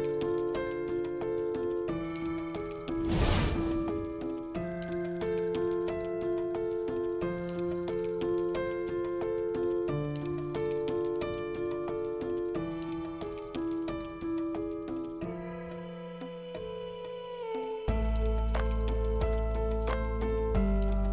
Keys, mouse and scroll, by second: 0.5 r, 2.0 space, 6.5 click, 11.4 shift+middle click, 13.7-14.9 drag, 16.4 ctrl+space, 17.6 space.